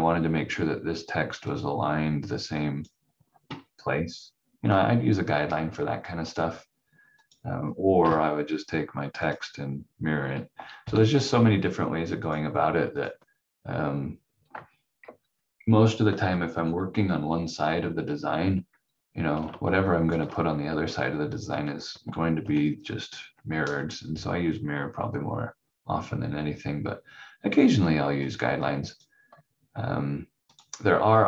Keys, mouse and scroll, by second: 1.5 click, 6.2 click, 8.0 Delete, 9.2 click, 10.8 m, 12.2 click, 15.0 Delete, 19.4 click, 22.0 ctrl+z, 28.2 click.